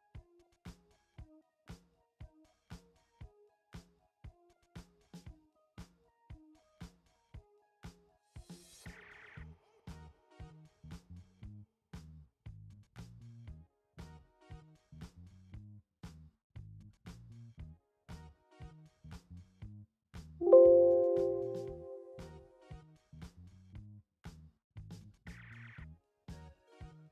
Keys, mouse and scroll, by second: 2.6-14.4 alt+drag, 20.2 click.